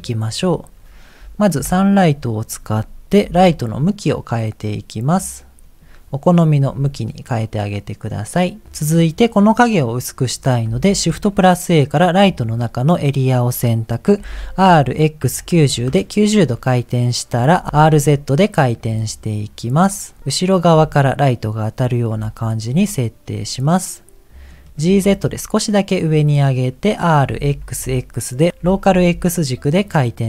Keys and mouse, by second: 0.4 click, 1.5 KP_7, 3.3 r, 6.5 r, 10.8 shift+a, 14.2 r, 17.3 r, 18.8 g, 20.2 g, 20.7 r, 22.1 g, 23.7 middle click, 24.8 g, 27.2 r, 28.6 r.